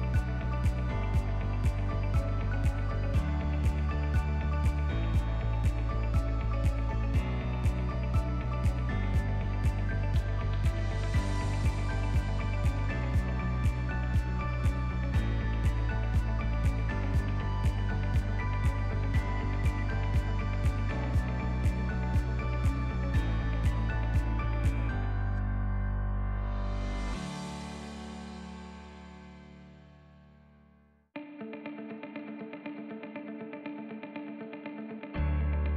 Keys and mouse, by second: 0.6-2.1 drag, 3.1-3.4 ctrl+middle drag, 3.5-4.1 middle drag, 4.3 shift+middle drag, 5.0 ctrl+s, 5.2-5.7 shift+middle drag, 5.8 ctrl+middle click, 6.3-7.2 middle drag, 7.5-7.9 middle drag, 8.0 ctrl+middle click, 8.1 ctrl+drag, 8.3-8.7 middle drag, 9.7 click, 10.8 click, 12.7-15.9 drag, 16.7 middle click, 17.5 middle click, 18.1-18.5 middle drag, 18.5 click, 19.4 click, 19.7-25.3 drag, 23.3 BackSpace, 25.6 ctrl+middle click, 26.1 middle click, 26.5 ctrl+middle click, 26.9 click, 27.2 click, 27.9 Delete, 28.3 click, 28.6 shift+a, 32.0-33.0 drag, 33.7-35.7 drag.